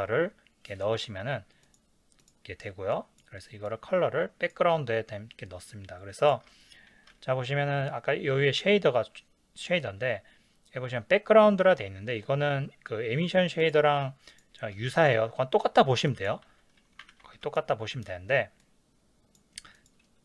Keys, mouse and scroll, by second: 2.9 click, 6.2 click, 16.5-18.7 drag, 16.5 x.